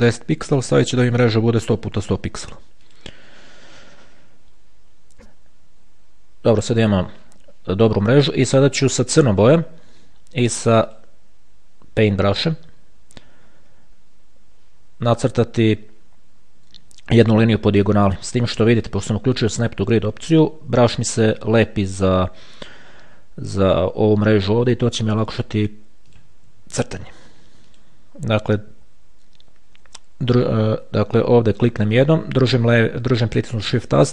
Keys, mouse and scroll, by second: 1.0 KP_1, 1.9 click, 1.9 KP_0, 3.1 click, 6.3-6.8 ctrl+scroll down 2, 10.8 click, 26.3 click, 27.9 shift+click, 30.1 ctrl+z, 31.3 ctrl+z, 32.2 click.